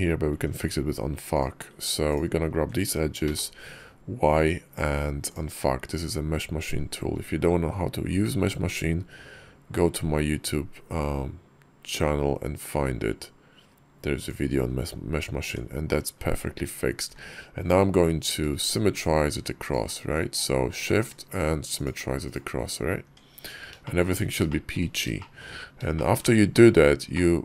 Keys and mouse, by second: 0.2 Tab, 1.2 click, 1.9 ctrl+click, 3.1 y, 15.3 Tab, 16.9 alt+x, 22.9 Tab, 23.7 shift+click, 24.3 shift+click, 25.0 shift+click, 25.8 shift+click, 27.0-27.4 middle drag.